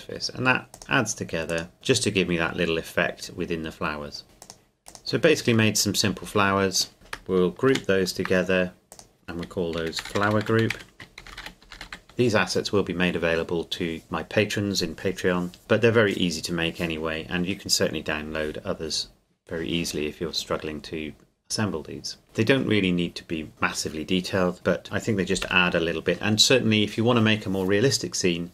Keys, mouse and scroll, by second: 1.9 scroll down 1, 4.4 click, 5.7 middle click, 6.7 shift+right click, 7.7 ctrl+g, 8.9 click, 9.8-11.9 typing, 24.5 click, 25.5 KP_0.